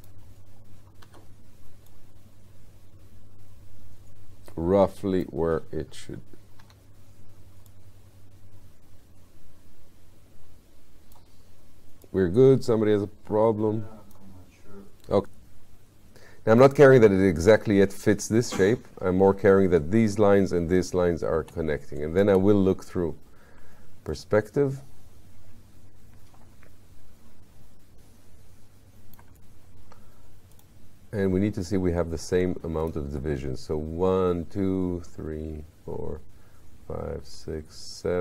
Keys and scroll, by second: 1.1 r, 6.7 w, 15.2 r, 21.4 space.